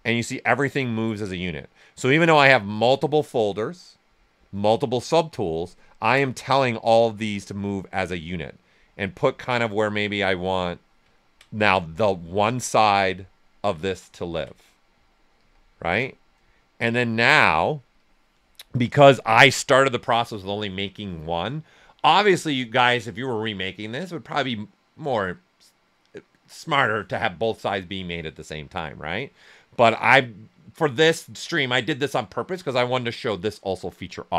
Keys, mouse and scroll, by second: 5.7 ctrl+right click, 5.7 typing, 6.5 alt+right click, 8.5-11.1 drag, 11.1 ctrl+right click, 12.9 q, 13.4 alt+right click, 14.2 ctrl+click, 15.3 shift+f, 16.5-17.9 right drag, 17.9-21.3 drag, 21.3 typing.